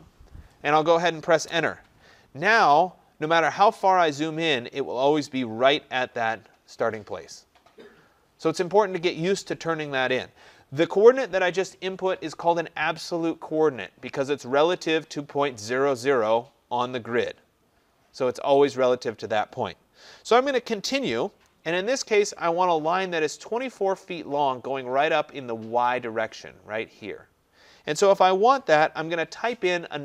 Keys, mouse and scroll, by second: 1.5 Return, 3.0-6.5 scroll, 7.9-11.4 scroll, 11.4 scroll, 13.3-15.6 scroll.